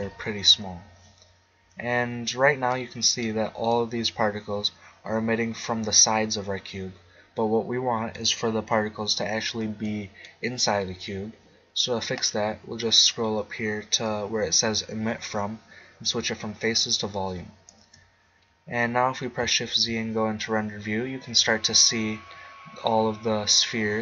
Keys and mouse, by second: 2.7 middle click, 5.7 middle click, 7.0 middle click, 9.8-11.7 middle drag, 12.2-15.3 middle drag, 16.6 click, 17.4-18.5 drag, 17.8 KP_0, 18.8 middle click, 19.7 shift+z, 19.8 middle click.